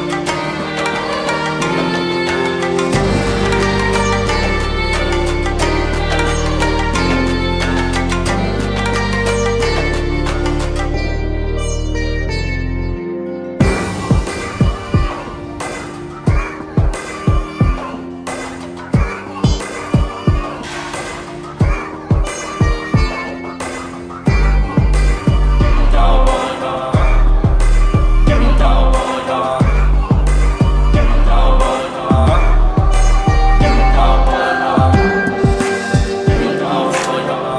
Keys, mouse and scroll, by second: 3.5-5.4 shift+drag, 6.9 ctrl+g, 9.3 alt+scroll down 1, 11.3 click, 11.8 right click, 12.8 click, 18.7 v, 19.0 ctrl+t, 24.4-27.8 shift+drag, 28.1 right click, 29.2-33.5 drag.